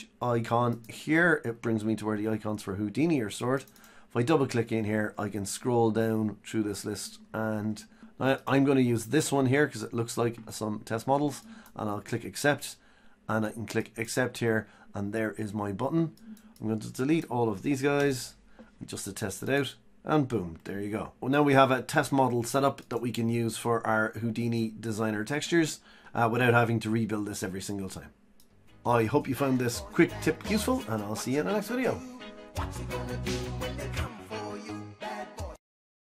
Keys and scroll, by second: 18.2 Delete.